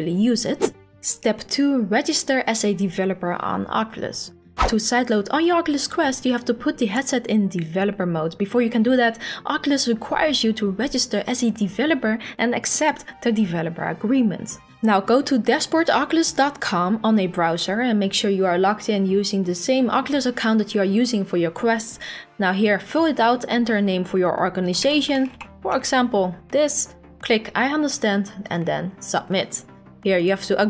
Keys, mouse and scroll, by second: 15.6 click, 23.1 click, 24.4-25.7 typing, 27.2 click, 28.6 click, 30.3 click.